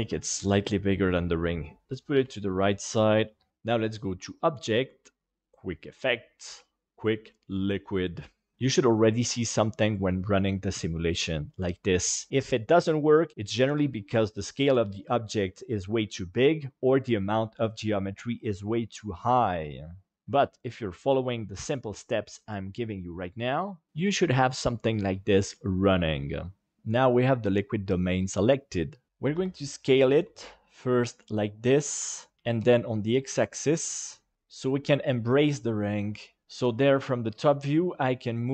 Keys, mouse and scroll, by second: 0.9 click, 4.3-7.5 drag, 29.3 Escape, 30.1 s, 32.5 x, 34.6 click, 36.1 click, 36.8 g.